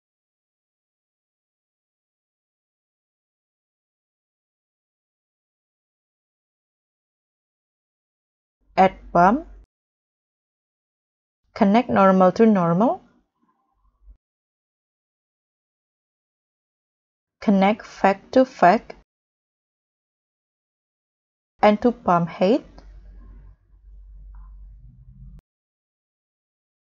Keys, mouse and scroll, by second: 4.8-5.8 scroll down 14, 5.8-6.9 scroll up 11, 8.2 shift+a, 9.1 b, 9.3 u, 9.4 m, 11.4-11.7 scroll up 1, 13.3 scroll down 3, 13.4 scroll, 13.4-13.9 scroll up 4, 14.4 scroll down 2, 14.6-14.9 scroll up 4, 15.7 scroll down 1, 15.9 scroll up 2, 16.0-16.7 scroll down 16, 16.7 scroll up 1, 16.7 scroll down 10, 19.4 scroll down 1, 20.5-20.9 scroll down 8, 20.9-21.3 scroll up 4, 24.6 scroll up 1, 25.5 middle click, 25.5 scroll down 3, 25.8 middle click, 26.2-26.9 scroll up 19.